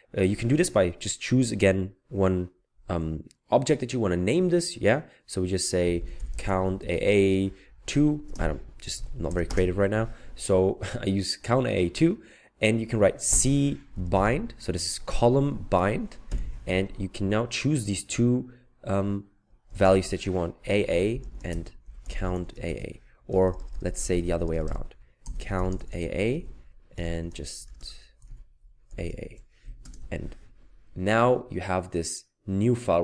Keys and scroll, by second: 5.8-7.9 typing, 9.0-9.3 typing, 13.4-14.7 typing, 16.3 typing, 19.7 typing, 20.9-30.1 typing, 29.8 ctrl+Return.